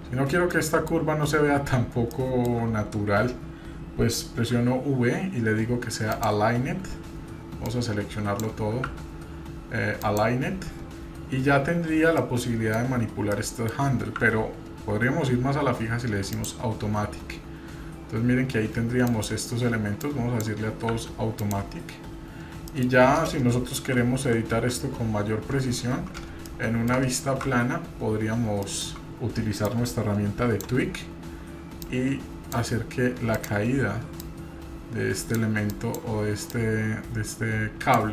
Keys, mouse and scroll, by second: 0.4 scroll down 1, 0.5 middle click, 2.1 shift+middle click, 4.5 v, 7.6-8.4 drag, 8.8 v, 11.9-12.2 scroll down 2, 12.2-12.8 middle drag, 13.3-13.7 middle drag, 14.2 2, 19.1-20.4 drag, 20.9 v, 22.7 middle click, 23.8 KP_3, 24.5 KP_1, 25.3-26.0 scroll up 1, 26.0 scroll up 1, 26.4 shift+middle click, 27.4 shift+z, 27.9-28.5 scroll up 1, 28.5 scroll up 1, 28.6 shift+middle click, 29.6-30.6 drag, 31.8 click, 33.3 click, 34.2-35.4 drag, 35.7 click, 36.5-38.0 drag.